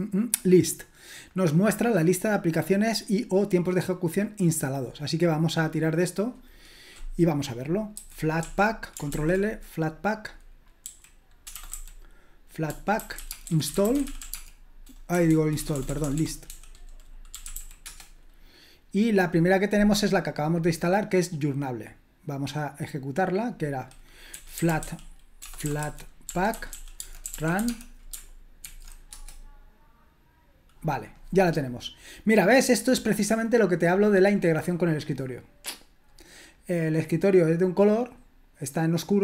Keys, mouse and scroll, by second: 0.3 click, 5.7 click, 7.9-8.3 typing, 9.1 ctrl+l, 11.3-18.0 typing, 21.8-24.3 drag, 24.1-28.6 typing, 29.0 Return, 31.9-34.1 drag.